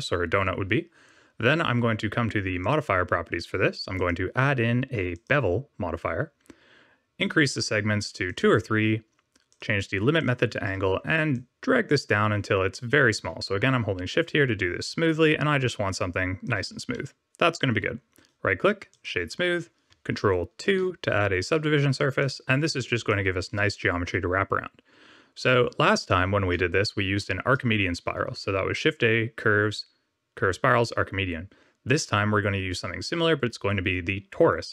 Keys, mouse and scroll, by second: 2.5 click, 3.9 click, 7.1 click, 8.2 click, 9.4 click, 11.3 shift+click, 16.9 middle click, 18.1 right click, 20.6 ctrl+2, 22.0 click, 22.9 click, 23.4 middle click, 24.7 scroll down 1, 25.4 middle click, 28.3 shift+a.